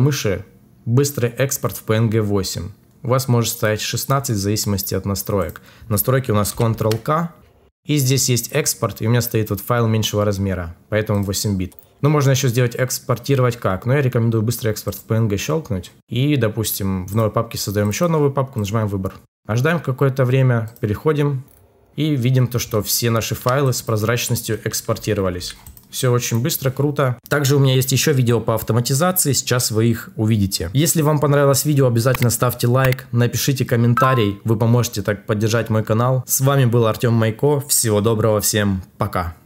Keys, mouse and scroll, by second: 0.0 shift+click, 6.7 ctrl+k.